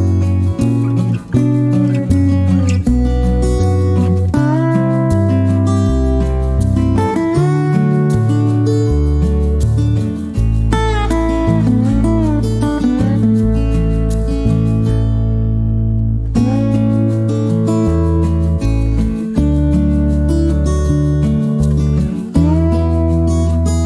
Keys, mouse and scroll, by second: 0.0 click, 2.1 click, 3.2 click, 4.4 click, 5.6 click, 9.0 click, 10.3 click, 12.2 click, 13.9 shift+click, 15.1 click, 16.9 click, 20.1 click, 22.3 click.